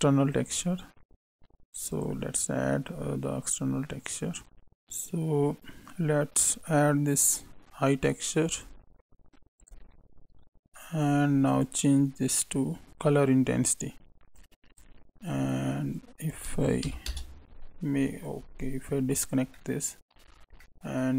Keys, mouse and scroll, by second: 0.3 click, 2.9-3.3 scroll down 5, 11.4 click, 14.3 click, 15.9 click, 18.0 ctrl+right click, 19.5 middle click, 20.2 scroll up 2, 20.6 middle click.